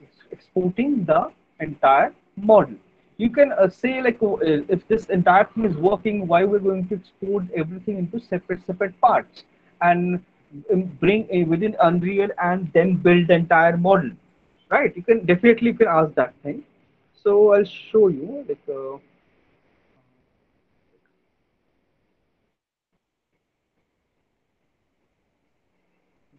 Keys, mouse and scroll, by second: 2.6 alt+right click, 3.5 alt+click, 4.0 click, 5.5 f, 8.3 alt+right click, 10.2 alt+middle click, 10.9 alt+right click, 22.0 click.